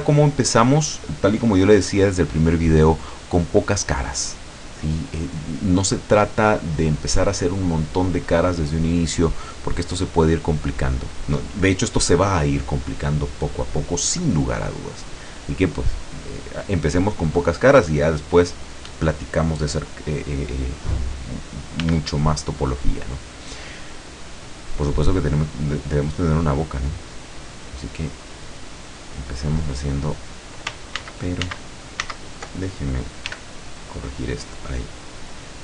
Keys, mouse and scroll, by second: 6.6-9.2 middle drag, 13.6-15.2 middle drag, 18.1-18.4 scroll up 2, 21.9 f, 23.1 click, 25.8-29.9 drag, 31.1 ctrl+z, 33.3 f, 34.2 click, 35.2-35.6 drag.